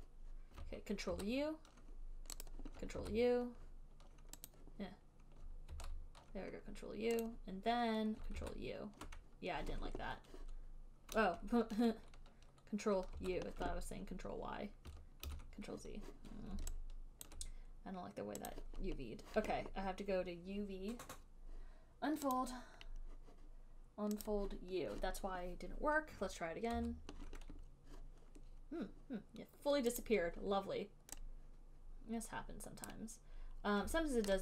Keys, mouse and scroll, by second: 1.4 ctrl+u, 2.8 click, 3.3 ctrl+u, 4.8 click, 6.0 ctrl+u, 7.6 click, 8.6 ctrl+y, 13.4 ctrl+u, 13.5 click, 15.5 ctrl+z, 17.6 alt+click, 18.9 click, 22.7 click, 23.2-23.7 scroll, 23.9 middle click, 24.5 click, 27.5 ctrl+u, 30.3 click, 33.2 click.